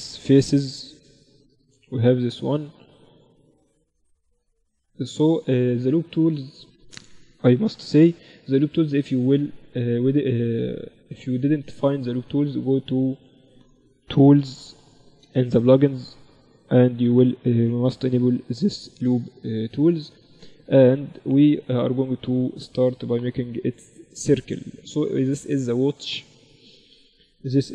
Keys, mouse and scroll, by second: 1.7-4.3 drag, 2.5-3.5 right drag, 3.0 w, 5.4-7.2 middle drag, 7.0 ctrl+alt+u, 20.4 w, 23.7-27.7 middle drag.